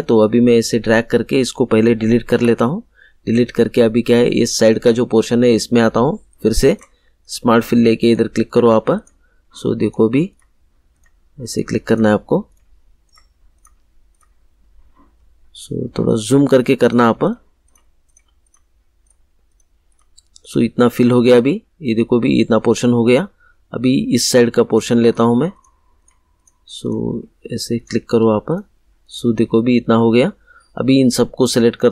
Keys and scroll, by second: 2.3 Delete.